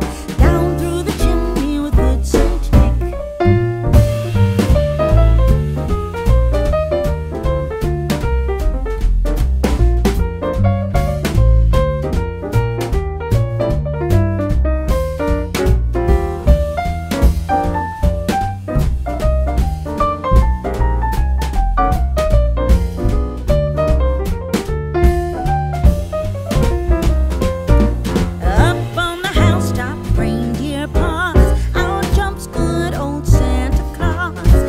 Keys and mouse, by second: 0.3 m, 2.9 m, 5.4-6.7 drag, 10.4 shift+a, 14.8-16.6 drag, 20.3-21.6 drag, 21.9-22.9 drag, 24.2-25.3 drag, 27.1 g, 30.3-32.7 middle drag, 34.5 Tab.